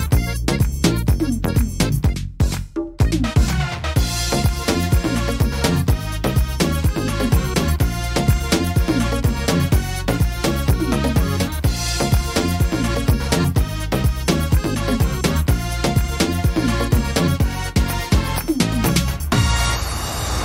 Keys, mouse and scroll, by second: 0.1-0.6 scroll up 1, 0.6 scroll down 1, 0.7 shift+middle click, 1.3-1.8 scroll down 2, 1.7 middle click, 2.1-2.9 scroll up 8, 2.9 middle click, 3.9 right click, 4.4 shift+right click, 4.9 right click, 5.4 shift+right click, 5.8 right click, 6.6 right click, 7.0 middle click, 7.4 shift+middle click, 8.1 right click, 9.2 l, 9.6-10.1 scroll down 4, 10.1 shift+middle click, 11.0 shift+d, 12.3 click, 14.8 shift+middle click, 15.8 middle click, 16.7 shift+middle click, 17.2 scroll up 3, 17.7 middle click, 18.6 right click, 19.0 shift+right click, 19.4 shift+right click, 20.2 click.